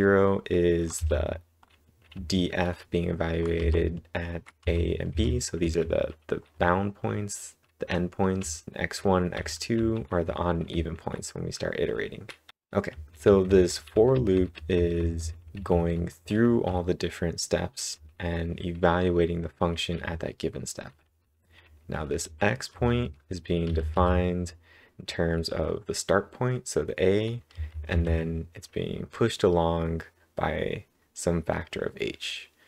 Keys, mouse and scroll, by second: 0.9 w, 2.1 h, 3.6-5.9 typing, 8.4-10.2 typing, 11.5-12.9 typing, 14.7-15.6 typing, 21.0 typing, 27.5 typing.